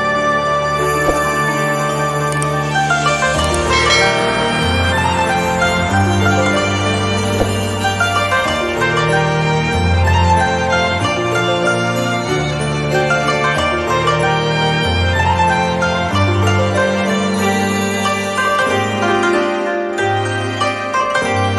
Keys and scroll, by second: 1.0 space, 6.7 z, 7.3 space, 11.8 z, 12.3 space.